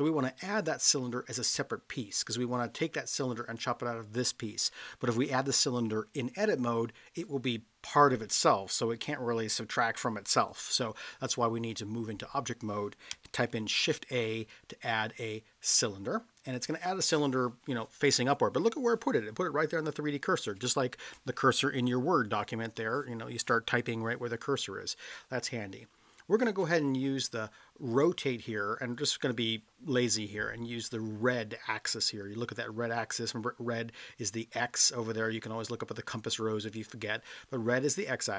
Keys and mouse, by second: 0.4 middle click, 16.5 shift+a.